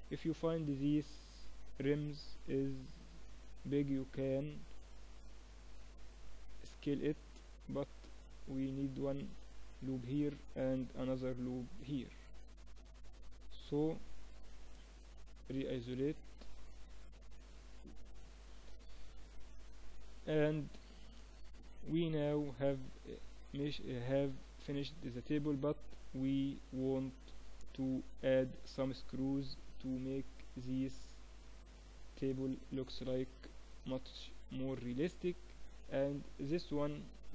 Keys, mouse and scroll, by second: 1.0 Tab, 4.1-5.9 middle drag, 5.5 Tab, 7.1 ctrl+r, 11.2 ctrl+r, 13.6 Tab, 16.8 KP_Divide, 20.4 middle click, 22.9-25.8 middle drag, 27.2-32.0 middle drag, 32.4 KP_1, 34.3-35.6 middle drag, 36.1 KP_1.